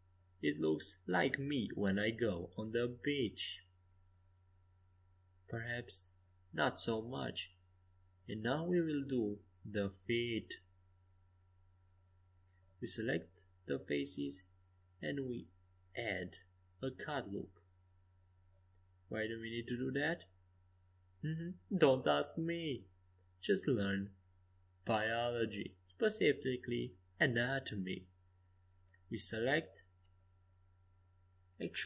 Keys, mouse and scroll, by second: 2.1-6.1 middle drag, 7.6 a, 8.1 a, 8.6 c, 10.9 middle click, 13.3 ctrl+r, 15.4 Escape, 17.2 a, 17.8 c, 20.0 a, 20.8 click, 21.1 c, 23.0 a, 24.2 c, 26.6-29.5 middle drag, 27.5 e.